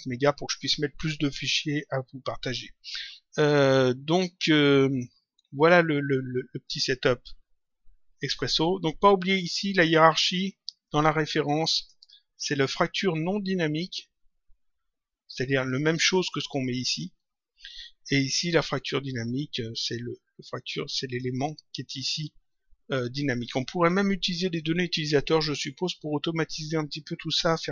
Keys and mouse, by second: 9.8 click, 15.4 click, 20.6 click, 23.8 click.